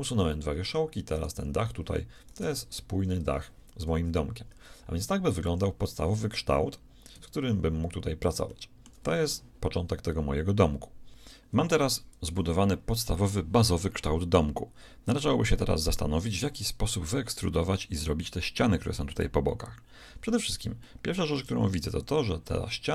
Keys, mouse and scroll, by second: 1.1 right click, 1.4 g, 2.5 g, 3.5 right click, 3.9 KP_1, 5.2 a, 5.5 a, 7.2 Escape, 8.4-10.2 shift+middle drag, 20.2 middle click.